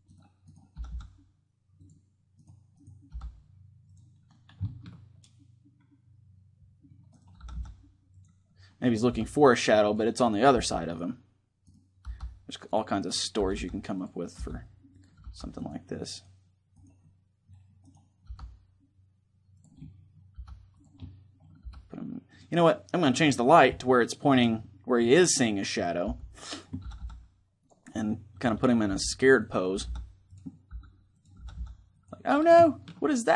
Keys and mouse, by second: 0.5 r, 1.5 right click, 2.8 g, 3.6 right click, 4.2-5.3 drag, 5.3-6.4 middle drag, 6.9-7.9 right drag, 7.1 r, 8.8 g, 10.2 g, 11.8 right click, 11.8 g, 13.1 r, 14.1 r, 14.7-15.9 drag, 15.0 g, 17.6-18.7 drag, 17.9 g, 18.7 right click, 19.3-24.7 drag, 20.1 g, 21.4 g, 24.7 middle click, 25.5-27.2 right drag, 25.8 g, 26.6 click, 26.6 r, 27.4-29.1 drag, 27.9-29.5 middle drag, 28.6 g, 29.1-32.1 drag, 29.5 r, 30.5 r, 31.1 r, 32.3 click, 32.3 middle click.